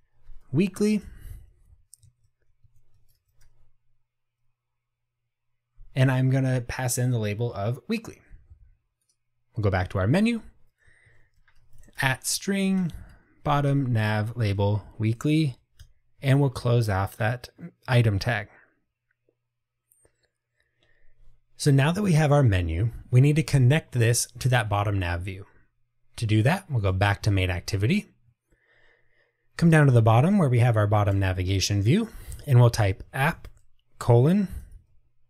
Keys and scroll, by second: 14.7 Return.